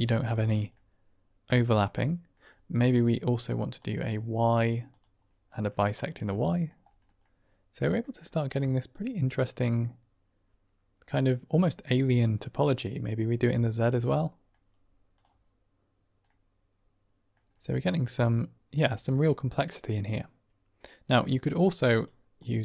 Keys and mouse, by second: 0.6-2.3 middle drag, 5.1 click, 5.9-6.6 middle drag, 7.1 drag, 7.3-7.8 middle drag, 7.8 click, 8.6-12.0 middle drag, 14.0-14.5 middle drag, 15.8 click, 16.1-16.4 middle drag, 16.4-17.2 drag, 17.8 click, 18.0-18.7 middle drag, 18.8 ctrl+middle drag, 19.1-20.8 middle drag.